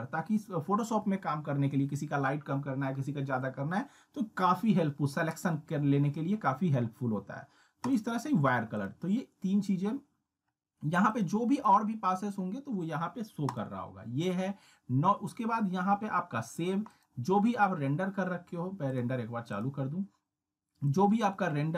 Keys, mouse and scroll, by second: 7.9 click, 11.0 click, 16.9 click.